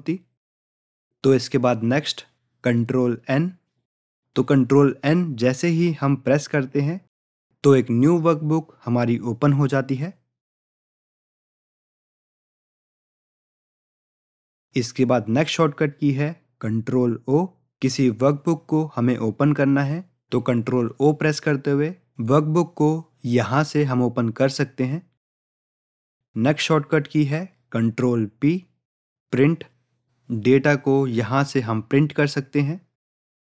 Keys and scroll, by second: 6.5 ctrl+n, 17.9 ctrl+o, 31.7 ctrl+p.